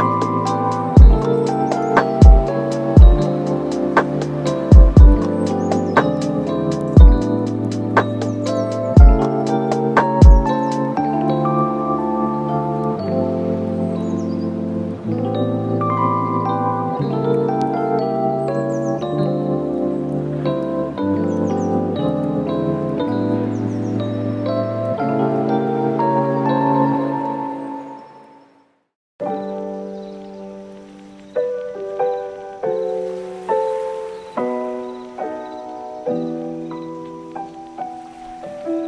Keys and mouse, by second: 0.6 click, 0.6 right click, 1.1 click, 1.1 right click, 1.3 click, 1.3 right click, 1.7 middle click, 1.9 middle click, 2.1 super+s, 3.5 click, 3.7 middle click, 4.3 middle click, 6.0 shift+d, 7.5 click, 7.8-9.6 drag, 10.3 click, 11.3 click, 11.4 middle click, 11.8 middle click, 12.0 shift+a, 12.4 shift+middle click, 12.6 shift+a, 14.9 middle click, 15.2 click, 15.4 shift+click, 15.7 n, 15.7 middle click, 17.6 click, 18.0 click, 18.6 click, 19.3 n, 19.6 click, 19.8 s, 20.7 middle click, 21.4 super+s, 21.7 click, 22.2 shift+middle click, 23.1 super+s, 23.4 click, 23.6 shift+middle click, 24.0 right click, 25.1 shift+middle click, 25.2 Tab, 25.4 middle click, 25.6 Tab, 25.7 Tab, 26.7 e, 28.4 Tab, 28.6 middle click, 28.7 super+s, 29.1 click, 29.6 click, 30.2 middle click, 30.8-32.4 drag, 32.8 click, 33.4 click, 33.8 shift+middle click, 34.0 shift+middle click, 34.3 click, 34.9 middle click, 35.5 right click, 35.7 super+s, 35.9 middle click, 36.1 right click, 36.8 right click, 37.6 shift+middle click, 37.7 s, 38.6 middle click.